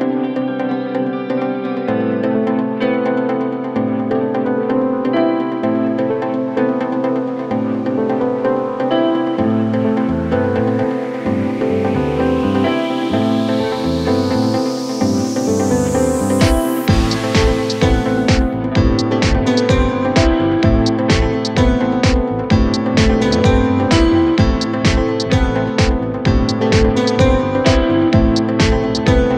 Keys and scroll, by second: 6.4 1, 7.4 9, 7.5 Return, 9.6 ctrl+z, 9.8 4, 15.8 0, 16.0 Return, 26.8 ctrl+z.